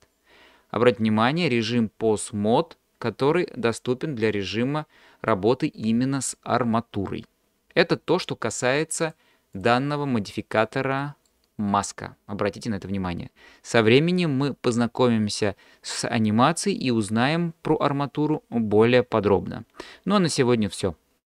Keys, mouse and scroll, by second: 9.0-9.6 drag, 10.3 click, 11.0 middle drag.